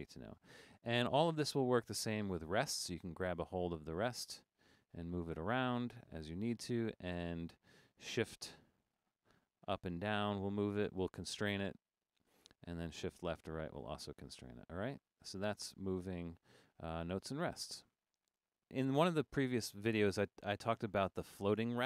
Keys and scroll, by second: 0.2 super+z, 1.0 super+z.